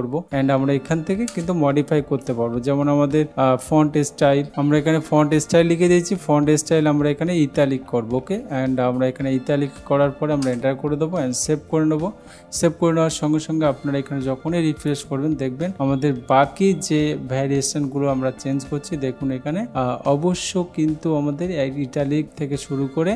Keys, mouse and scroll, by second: 0.3-1.3 drag, 1.4 Return, 4.5 Down, 4.5 Return, 8.1-9.0 typing, 10.5 Return, 12.2 ctrl+s, 14.9 click.